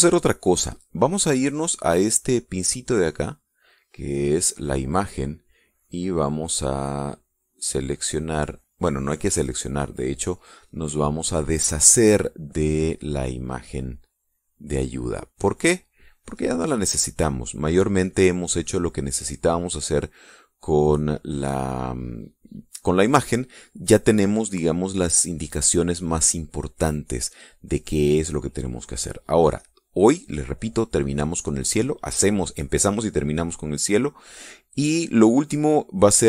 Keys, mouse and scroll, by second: 3.6 click, 6.2 click, 7.3 click, 15.8 click, 17.6-19.0 drag, 24.4-25.1 drag, 28.4-29.8 drag.